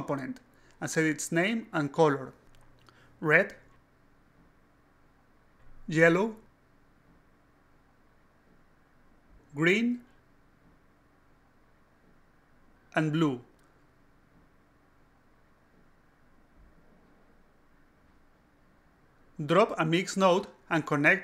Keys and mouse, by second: 0.4-1.5 typing, 2.5 click, 4.1 click, 4.4 click, 5.3 click, 5.8 click, 6.1-7.2 typing, 7.4 click, 8.1 click, 8.7 click, 9.0 click, 9.3 shift+g, 9.7 n, 11.3 click, 12.0 click, 12.3 click, 12.5-13.4 typing, 14.3 click, 15.4 click, 15.5 click, 15.8 click, 16.4 click, 16.5 click, 16.8 click, 17.9 click, 19.1 click, 20.0 click, 20.8 click.